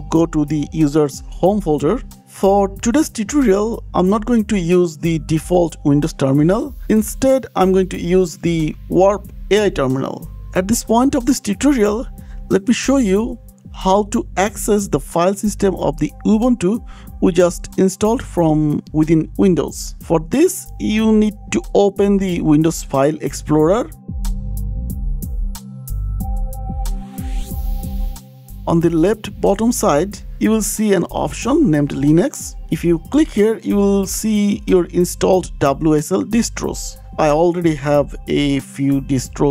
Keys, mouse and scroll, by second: 0.4 click, 2.1 click, 2.7 click, 4.2 shift+click, 6.8 click, 7.5 click, 20.2 scroll down 2, 22.2 click, 23.2 scroll, 24.3 click, 25.2 super+e, 27.3 click, 27.5-31.1 click, 28.5-29.4 scroll down 13, 33.6 scroll down 10.